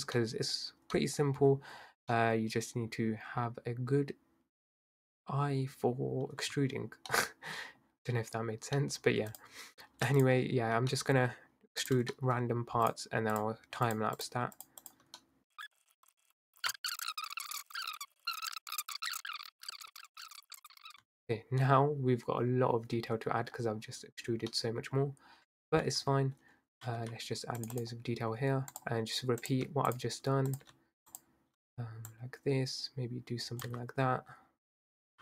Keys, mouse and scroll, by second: 0.2-0.5 middle drag, 0.5-0.9 scroll down 2, 0.9-1.8 scroll up 2, 1.0-1.3 middle drag, 1.8-2.1 scroll down 3, 2.1-5.2 middle drag, 6.6 Tab, 7.1 middle click, 7.9-8.3 scroll up 3, 8.3-8.8 scroll down 2, 8.8 middle click, 9.3 click, 10.2 shift+click, 10.9 middle click, 11.8 shift+click, 12.1 middle click, 12.9 shift+click, 13.3 shift+click, 13.8 shift+click, 14.2 shift+click, 14.6 shift+click, 14.9 shift+click, 15.2 middle click, 15.5 shift+click, 15.6 middle click, 15.8 shift+click, 15.9 middle click, 16.2 shift+click, 16.3 click, 16.6 middle click, 17.4 middle click, 17.5 scroll up 1, 17.8 ctrl+z, 17.9 click, 18.1 alt+shift+click, 18.4 click, 18.8 middle click, 19.1 scroll down 1, 19.2 middle click, 19.5 scroll up 1, 19.6 click, 19.7 middle click, 20.0 middle click, 20.0-20.6 typing, 20.3 ctrl+z, 20.9 middle click, 21.0 Tab, 21.3-24.3 middle drag, 24.6-25.9 middle drag, 25.9 Tab, 26.4-27.0 scroll up 2, 27.0 ctrl+r, 28.7 click, 29.9 alt+shift+click, 30.5 click, 31.1 alt+shift+click, 32.0 click, 33.6 s.